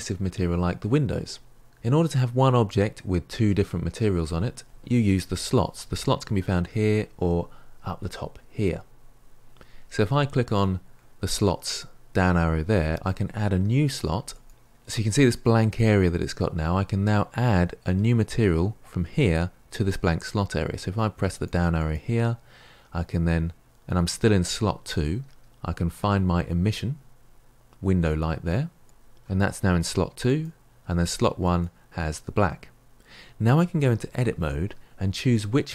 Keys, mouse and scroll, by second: 14.5-28.8 drag, 31.3-34.3 drag, 34.3 Tab, 35.5-35.7 middle drag.